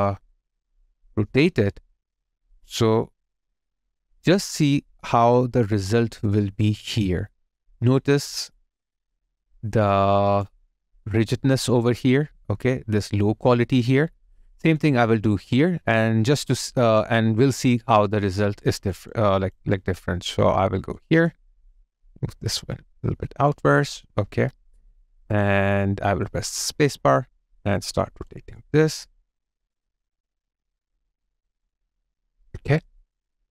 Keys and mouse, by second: 1.0 space, 9.1 alt+click, 10.6 alt+right click, 13.0 alt+click, 14.0 alt+right click, 14.8 alt+double right click, 18.9 double click, 20.9 alt+click.